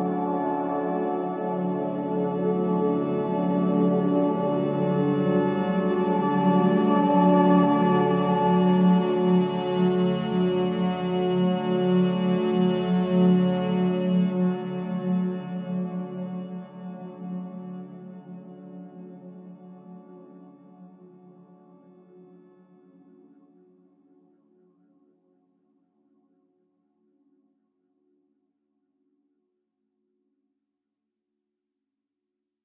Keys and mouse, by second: 2.6 click, 3.7 shift+click, 4.6 shift+click, 5.1 shift+click, 6.5 shift+click, 7.4 shift+click, 14.3 click, 15.6-17.2 drag.